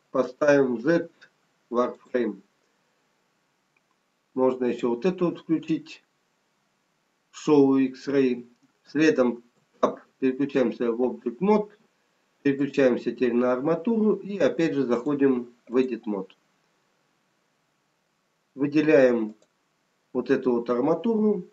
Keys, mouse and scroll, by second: 4.6 click, 9.6 Tab, 12.7 click, 14.9 click, 17.2 scroll up 1, 19.4 click.